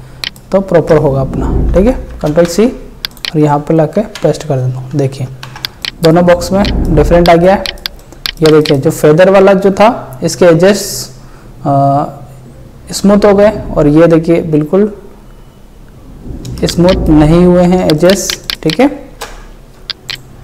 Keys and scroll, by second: 1.7 ctrl+c, 4.0 ctrl+v, 16.6 ctrl+space, 17.1 ctrl+space, 19.2 ctrl+alt+space.